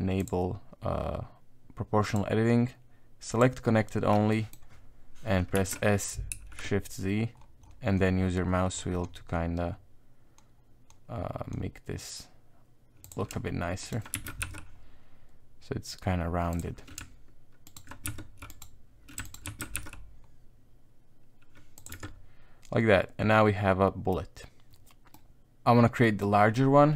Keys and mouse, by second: 0.2 click, 2.1-3.8 drag, 4.3 middle click, 5.5 s, 13.8 alt+right click, 14.1 s, 17.6 alt+right click, 18.0 shift+s, 18.5 right click, 19.2 alt+right click, 19.4 shift+s, 21.9 Tab, 22.0 middle click, 23.0-24.1 middle drag, 25.1 middle click, 25.3 Tab, 26.0 middle click.